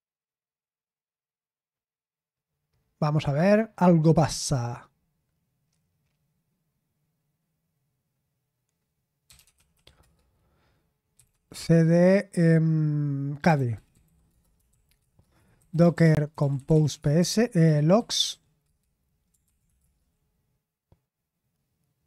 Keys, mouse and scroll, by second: 3.1 click, 11.1 typing, 13.2-18.7 typing, 19.8 ctrl+p.